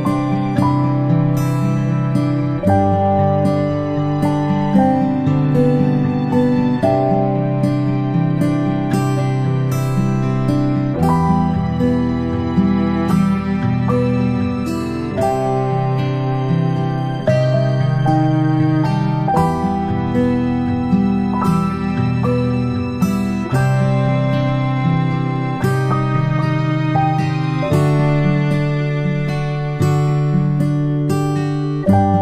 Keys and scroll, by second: 5.4 ctrl+z, 21.6 ctrl+z, 26.7 i, 31.1 ctrl+z, 31.7 ctrl+z.